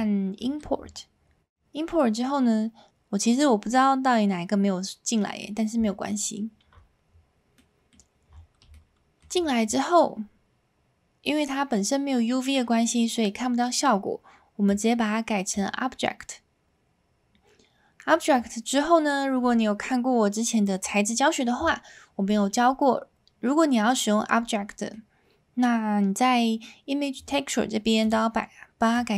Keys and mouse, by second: 1.5 middle click, 5.4 middle click, 7.7 middle click, 8.7-9.2 shift+middle drag, 14.7-15.6 drag, 18.2 middle click, 24.8 middle click, 27.3-28.1 drag, 29.0 click.